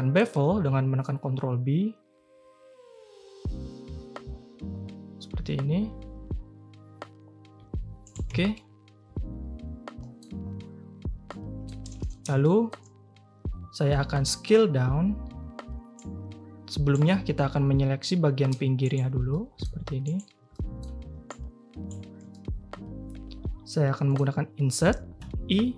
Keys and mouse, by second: 8.3 Tab, 8.5-10.1 drag, 10.4 Tab, 11.3 click, 11.8 a, 12.0 a, 12.4 shift+click, 13.9 drag, 14.5 3, 16.0-16.9 drag, 18.1 click, 18.8 shift+click, 19.3 middle click, 20.0 shift+middle click, 20.5 middle click, 21.3 shift+middle click, 22.3-24.1 middle drag.